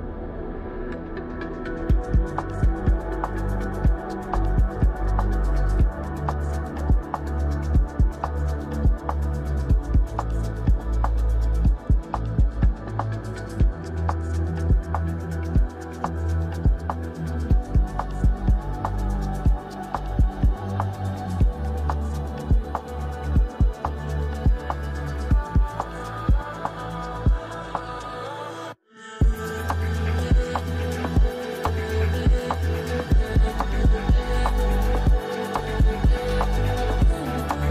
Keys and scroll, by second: 25.6 space, 29.2 space.